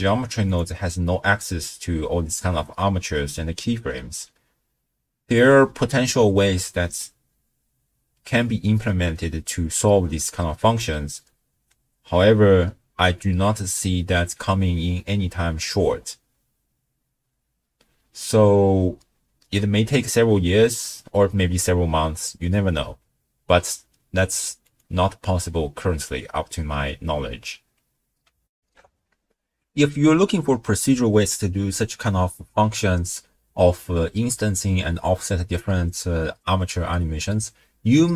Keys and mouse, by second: 0.5 click, 24.7 click, 28.5 ctrl+alt+shift+w, 28.8 ctrl+alt+shift+q.